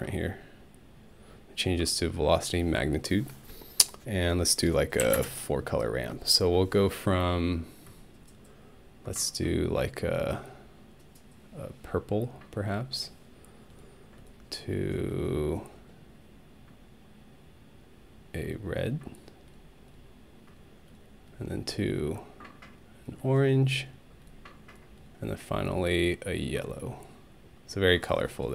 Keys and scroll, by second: 5.0 4, 5.2 Return.